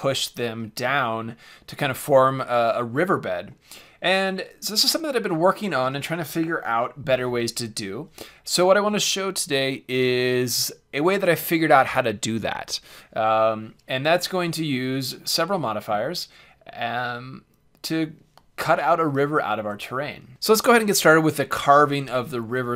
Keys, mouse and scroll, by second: 3.0 Tab, 3.5-5.5 middle drag, 14.7-16.7 middle drag, 20.3 click, 20.3 x.